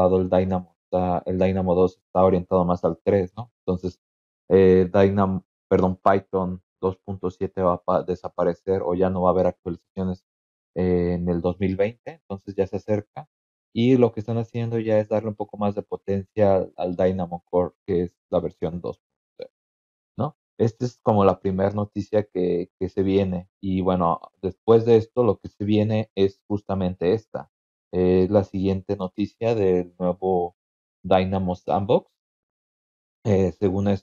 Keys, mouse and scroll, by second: 16.8 scroll down 2, 17.4-18.0 scroll down 4, 19.5-20.7 scroll up 6, 24.5 click, 25.2 click, 33.1-34.0 scroll down 6.